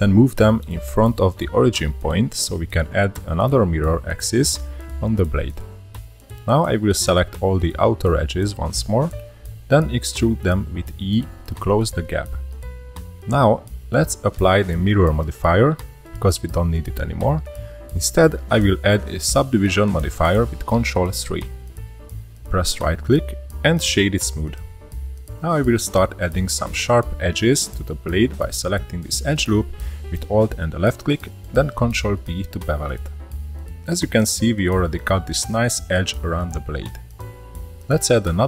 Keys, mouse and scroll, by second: 2.7-3.5 scroll down 1, 4.5 click, 6.1 click, 6.4 click, 6.7 ctrl+z, 7.4 shift+click, 7.9 middle click, 8.7 scroll down 2, 9.0-10.2 middle drag, 10.2 e, 13.7-15.0 middle drag, 15.0 click, 15.7-16.3 drag, 16.4 shift+3, 18.0 middle click, 18.9 ctrl+3, 21.7 click, 22.5-23.6 right drag, 23.6 click, 24.9 middle click, 24.9-25.6 scroll up 4, 25.9-26.4 middle drag, 26.4 scroll up 2, 26.9 2, 27.5 alt+click, 28.2-28.6 middle drag, 29.5 middle click, 29.7 ctrl+b, 33.0-33.6 scroll down 3, 33.6 Tab, 33.8 click, 34.3-34.7 shift+middle drag, 35.3-37.5 shift+middle drag, 37.5 scroll up 3, 37.7 ctrl+r.